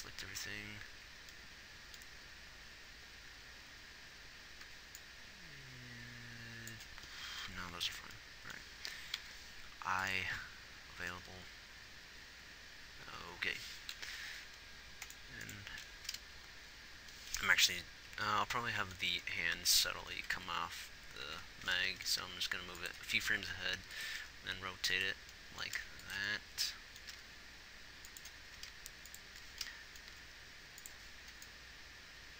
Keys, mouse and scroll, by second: 1.5 b, 10.6 i, 17.1 z, 20.5 Right, 20.7 Right, 21.6 Right, 22.5 g, 23.7 r, 24.6 g, 26.3 g, 27.6 g, 28.9 r, 30.6 r, 31.9 click.